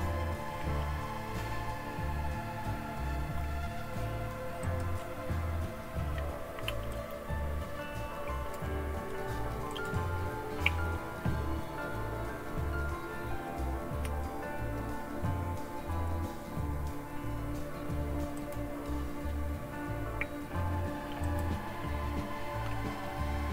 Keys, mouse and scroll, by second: 4.6 click, 6.9-9.9 drag, 18.4 click, 21.2 click, 23.2-23.5 scroll down 1.